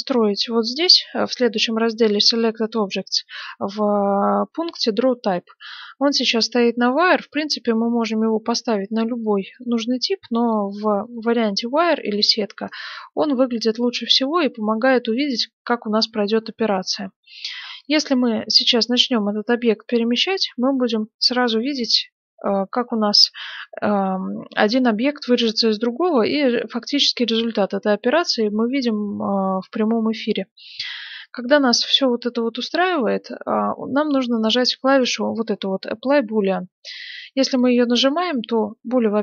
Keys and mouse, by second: 13.0-19.3 middle drag, 19.3-20.4 drag, 22.9-26.5 middle drag, 26.5-28.7 drag, 28.7-37.5 middle drag, 37.5-39.2 drag.